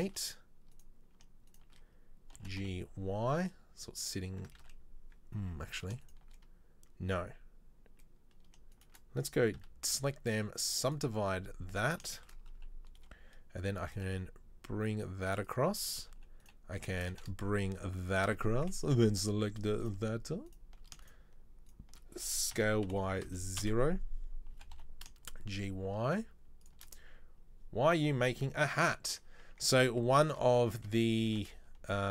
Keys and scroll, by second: 2.5 g, 4.7 ctrl+z, 9.6 w, 13.8 g, 17.0 g, 18.9 Delete, 22.8 s, 24.7 g, 30.5 a, 31.5 e.